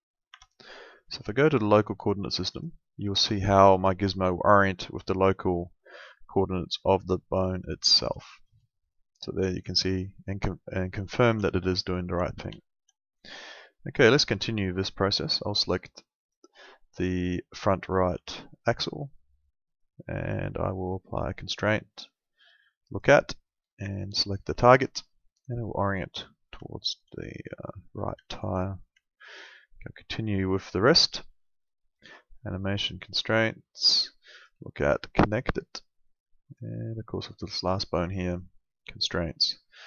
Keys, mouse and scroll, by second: 0.3 Escape, 1.2 click, 8.2 middle click, 8.7 alt+middle click, 11.5 middle click, 11.8 alt+middle click, 12.6 alt+middle click, 13.7 alt+middle click, 14.5 alt+middle click, 16.2 click, 16.9 alt+middle click, 20.2 click, 22.9 click, 25.1 alt+middle click, 26.7 alt+middle click, 27.6 alt+middle click, 28.2 alt+middle click, 29.0 alt+middle click, 30.5 click.